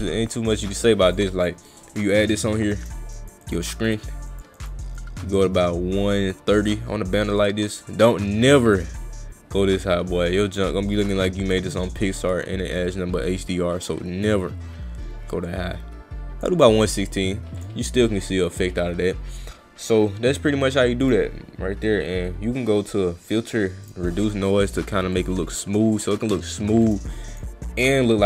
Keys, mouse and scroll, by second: 1.1 click, 1.9 click, 2.3 click, 2.7 click, 3.1 click, 3.5 click, 3.7 click, 3.9 click, 4.3 click, 4.6 click, 5.0-8.8 drag, 11.6 click, 15.5 click, 17.1 click, 17.6 click, 21.0 click, 23.8 click, 25.2 click, 25.5 click, 26.9 click, 27.3 click.